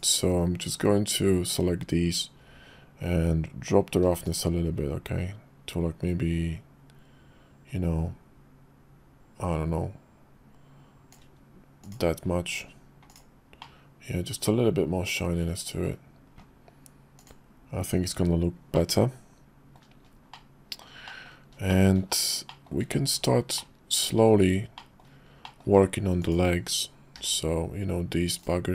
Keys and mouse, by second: 4.3-11.1 shift+drag, 11.8 click, 13.1 click, 13.6-15.9 middle drag, 18.8 middle click, 20.3 middle click, 21.1 middle click, 21.7 shift+middle click, 22.5 shift+middle click, 23.6 middle click, 24.8 middle click, 25.4 shift+middle click, 26.2 click.